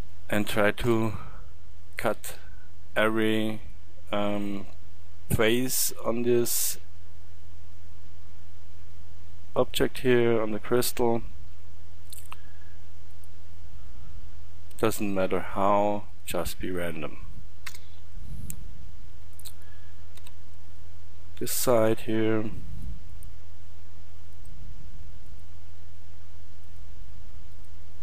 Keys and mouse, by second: 0.8 k, 18.2-18.9 middle drag, 20.2 k, 23.4-28.0 drag.